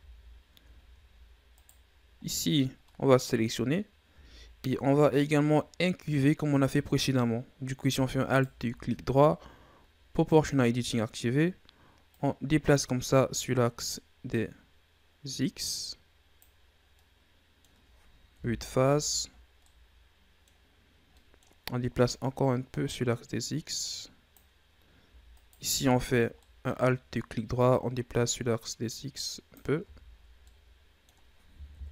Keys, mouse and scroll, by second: 0.7 scroll down 3, 1.0-1.4 scroll up 4, 1.4 right click, 2.2-2.9 scroll down 2, 2.9-3.8 middle drag, 3.8 scroll up 2, 4.1 Tab, 4.4 scroll down 1, 4.6-7.8 middle drag, 8.1 alt+right click, 10.2 click, 12.0-15.2 drag, 16.7 scroll down 1, 16.9-18.3 middle drag, 18.3 KP_1, 19.6-20.7 middle drag, 20.7-21.1 scroll up 2, 21.1 middle click, 22.0-25.1 drag, 25.3 alt+right click, 26.3 middle click, 26.7-27.5 scroll up 1, 27.5-29.7 drag, 29.7 Tab, 30.2 scroll down 1, 30.4-31.7 middle drag, 31.7 KP_1.